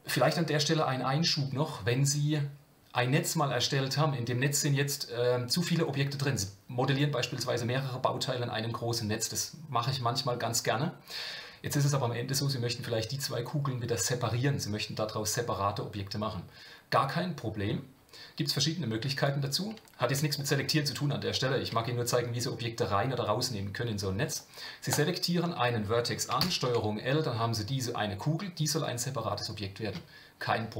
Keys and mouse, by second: 19.2 click, 19.6 middle click, 20.4 shift+middle click, 21.3 shift+middle click, 24.9 click, 26.4 ctrl+l.